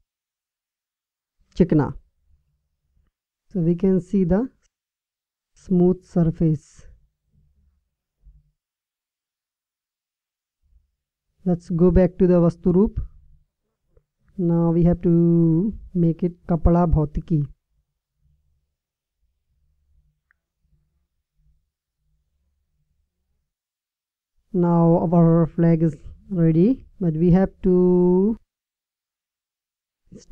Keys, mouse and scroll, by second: 7.8 Tab, 14.5-18.0 drag, 20.8-22.6 drag.